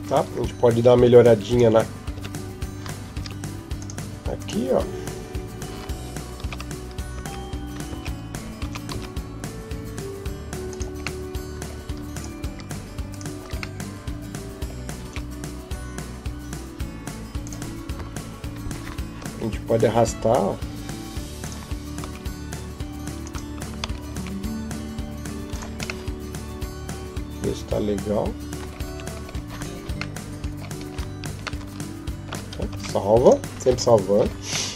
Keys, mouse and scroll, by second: 0.5 Tab, 1.1 Tab, 1.3 right click, 2.0 Tab, 3.0 ctrl+Tab, 4.2 alt+right click, 6.9 z, 7.7 z, 8.4 s, 11.0 middle click, 11.9 alt+right click, 12.9 alt+right click, 13.6 middle click, 14.9 s, 17.7 KP_7, 19.0 g, 21.9 r, 23.9 s, 25.9 middle click, 28.7 Tab, 28.9-29.4 scroll down 4, 30.0 middle click, 30.4 scroll up 1, 30.6-31.4 scroll down 1, 31.4 shift+middle click, 32.5 ctrl+s, 34.2 scroll down 1, 34.5 middle click.